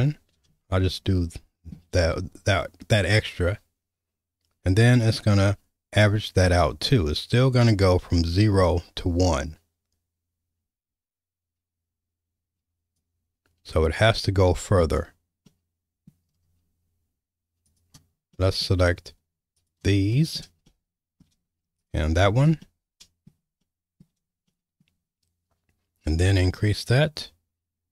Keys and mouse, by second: 0.8 shift+middle click, 4.8-13.0 drag, 15.4 middle click, 18.3 middle click, 19.5 ctrl+click, 20.1 middle click, 20.7 shift+middle click, 21.8 ctrl+click, 22.6 middle click, 23.6 shift+middle click, 24.5 middle click, 26.3-27.9 drag.